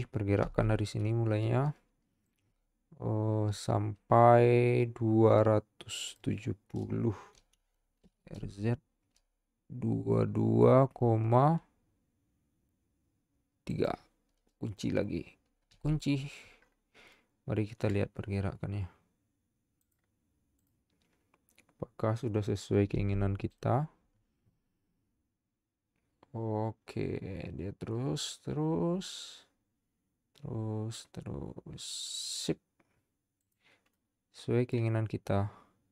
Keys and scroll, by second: 0.6 i, 7.6 r, 8.0 z, 15.7 i, 23.1 z.